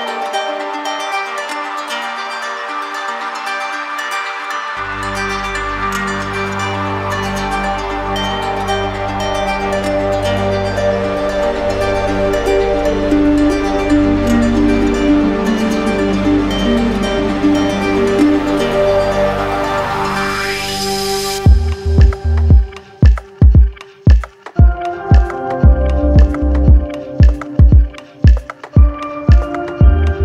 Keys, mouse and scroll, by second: 0.5 click, 1.2 click, 2.5 click, 3.4 right click, 6.8 right click, 8.0 right click, 8.8 right click, 9.2 shift+right click, 9.3 shift+right click, 10.7 click, 11.7 right click, 12.6 right click, 12.8 click, 13.5-15.2 right drag, 17.0-18.0 right drag, 18.2 click, 18.8 right click, 21.2 alt+click, 22.7 right click, 23.3 right click, 24.6 right click, 25.1 click, 25.9 click, 26.4 alt+click, 26.8 alt+click, 27.4 click, 27.8 d, 28.0 d, 28.2 d, 28.4 d, 29.3 alt+right click.